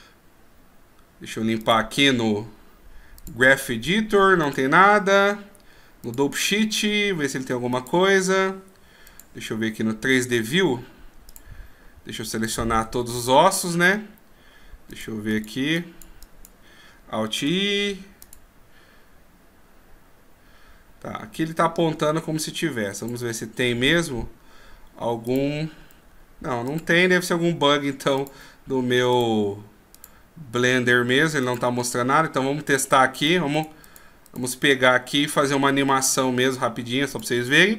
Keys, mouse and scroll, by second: 1.6 click, 11.4 click, 12.3 right click, 12.8 a, 13.1 a, 14.9 click, 15.3 click, 15.7 click, 16.2 click, 17.4 alt+i, 22.9 click, 37.2 click.